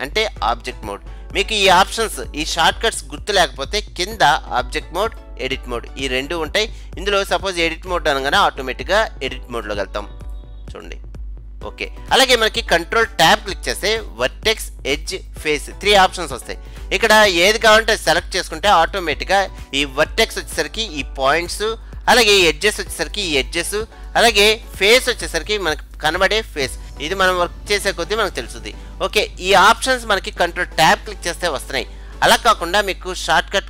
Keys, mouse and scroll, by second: 5.1-7.0 drag, 11.5 middle click, 13.4 ctrl+Tab, 20.6-22.7 middle drag, 24.5-29.3 middle drag, 31.6 ctrl+Tab.